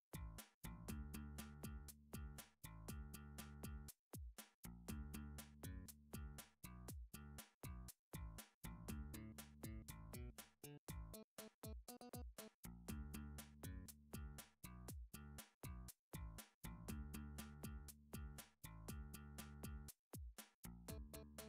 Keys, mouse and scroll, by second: 0.0 click, 0.4 shift+click, 2.3 middle click, 2.9 shift+click, 3.2 f, 4.0 shift+middle click, 4.4 click, 4.4-4.8 scroll, 5.0 shift+click, 5.1 shift+middle click, 6.1 f, 6.6 shift+middle click, 7.3 middle click, 7.8 middle click, 8.0 shift+middle click, 8.2 click, 9.3 middle click, 9.9 shift+click, 11.3 f, 11.7 click, 12.1 shift+click, 13.9 f, 14.5 click, 14.8 shift+click, 15.3 f, 16.3 ctrl+z, 16.7 shift+click, 17.2 f, 17.8 click, 18.3 shift+click, 19.1 f, 19.6 shift+middle click, 20.6 middle click, 21.1 middle click, 21.3 shift+middle click, 21.4 click.